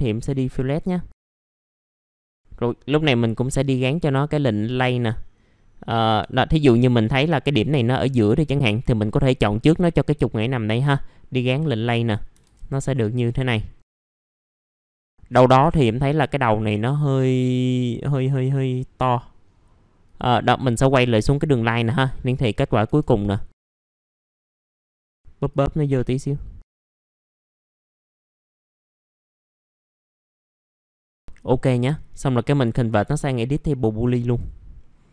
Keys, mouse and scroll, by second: 0.2 click, 0.6-1.1 scroll up 1, 1.1 click, 1.5-2.2 scroll down 2, 1.8 right click, 2.2-6.1 scroll up 1, 6.1 1, 6.6 click, 13.8 middle click, 14.1-14.4 scroll up 1, 14.4 middle click, 14.7 scroll down 1, 14.8-15.4 scroll up 1, 15.9 middle click, 16.3 scroll down 1, 19.5-20.0 scroll up 1, 20.0 click, 22.8 1, 23.5 middle click, 23.6 F3, 23.7 scroll up 1, 24.2 click, 24.6 F3, 24.9-27.5 drag, 27.5 scroll up 1, 27.8 click, 28.2 F3, 28.5-29.1 scroll down 2, 28.7 click, 29.1 middle click, 30.3 F4, 30.8 middle click, 34.2 click, 34.8 middle click.